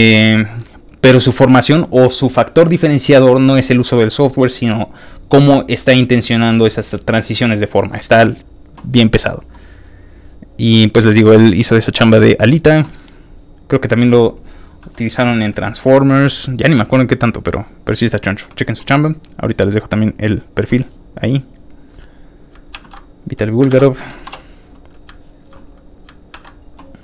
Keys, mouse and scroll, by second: 0.8 click, 10.2 scroll up 3, 13.0 scroll up 2, 14.8 middle click, 16.3 click, 17.2 click, 18.1 click, 19.3 click, 19.9 middle click, 21.7 click, 22.1 click, 22.7 ctrl+c, 23.4 click, 23.5 c, 23.7 ctrl+v, 24.2 Return, 25.8 ctrl+click, 26.3 ctrl+w.